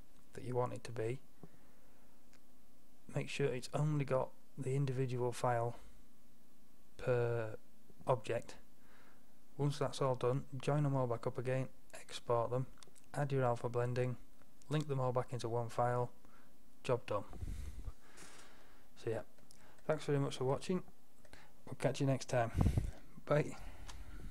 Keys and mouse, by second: 19.1-20.6 drag, 22.6-24.3 middle drag.